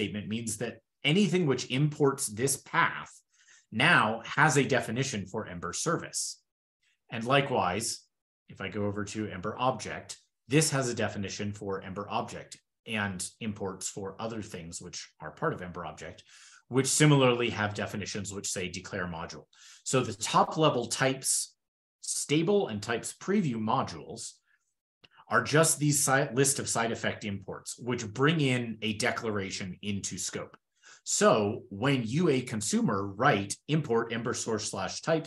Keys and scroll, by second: 7.3 super+w, 19.0 super+w, 19.4 super+w.